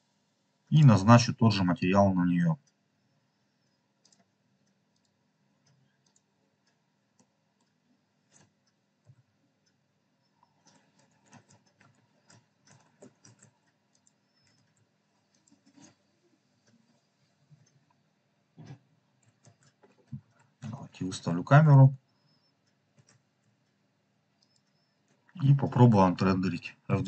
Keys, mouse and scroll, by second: 0.6 click, 3.9 click, 4.8-6.2 drag, 7.0-7.6 middle drag, 9.0 KP_0, 11.2-12.7 typing, 13.8 click, 14.5 shift+`, 15.2 click, 16.4 KP_0, 17.4 KP_0, 19.4-23.3 typing, 24.5 click.